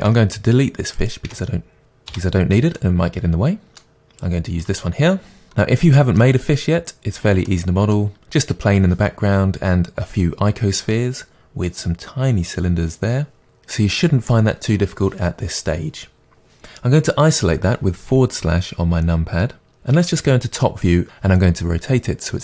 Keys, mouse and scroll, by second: 0.1 Delete, 0.9 click, 1.3 Delete, 1.7 middle click, 1.8 click, 2.1 Delete, 2.1-4.2 middle drag, 4.2-5.5 drag, 5.5-9.0 middle drag, 6.8-7.5 scroll up 2, 9.1 middle drag, 11.1 middle drag, 16.3-22.4 middle drag, 19.9 KP_7, 21.8 r.